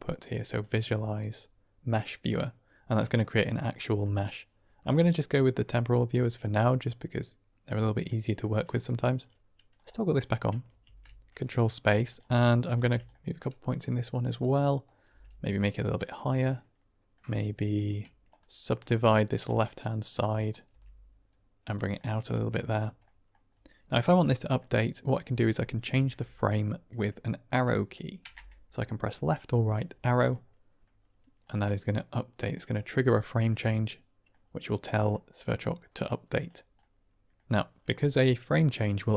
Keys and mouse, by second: 3.8 middle click, 5.6-6.3 middle drag, 8.0 middle drag, 9.6 click, 10.1 middle click, 10.8 ctrl+space, 11.3 drag, 11.4 middle click, 12.4 middle drag, 12.7 Tab, 13.2-14.8 middle drag, 15.0 g, 15.7 click, 15.9-17.0 middle drag, 17.7 shift+click, 18.2-18.7 right drag, 19.2 click, 20.3 click, 20.6 g, 21.6 click, 21.9 middle click, 22.2 Tab, 22.9 middle drag, 24.5-25.1 middle drag, 28.2 Right, 30.1-30.7 middle drag, 31.5-32.4 middle drag, 33.7 middle drag, 33.9-34.2 drag, 35.0-35.5 middle drag, 36.3 click, 36.7 middle drag, 36.9 click, 37.1-39.1 middle drag.